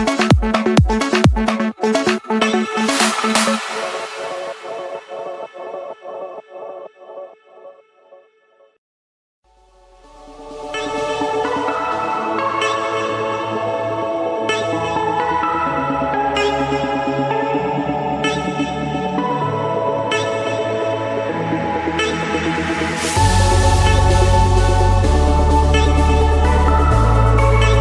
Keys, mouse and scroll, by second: 1.2-2.3 typing, 2.8 Return, 5.5-6.6 drag, 7.2-8.3 typing, 8.8 Return, 10.2-11.3 drag, 11.9-13.6 typing, 15.0 Escape, 18.0 click, 18.8 click, 19.7 click, 21.0 click, 22.1 shift+click, 23.4-24.5 typing, 25.0 Return, 26.8-27.8 typing.